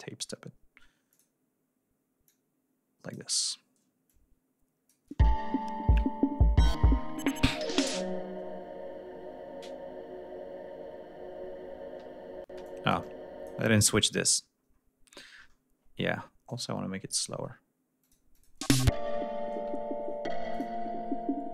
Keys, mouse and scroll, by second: 0.0 d, 1.2 click, 2.3 click, 4.1-5.1 drag, 5.3 space, 6.7 ctrl+scroll down 2, 7.0 ctrl+scroll up 2, 12.5 space, 12.7 click, 14.0 click, 16.5 click, 18.1 click, 18.6 click, 18.6 space, 19.8 ctrl+scroll down 2, 20.6 ctrl+click, 21.0 ctrl+scroll down 2, 21.3 ctrl+scroll up 2.